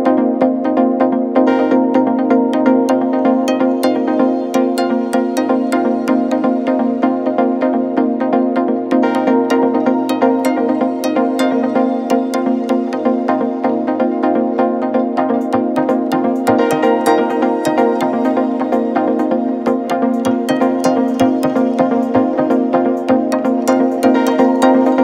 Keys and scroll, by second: 0.3 ctrl+z, 3.8 3, 3.9 0, 4.3 Return, 7.0 3, 8.3 Return, 13.3 ctrl+-, 15.3 ctrl+0, 19.5 alt+Tab, 20.9 alt+Tab, 21.3 alt+Tab.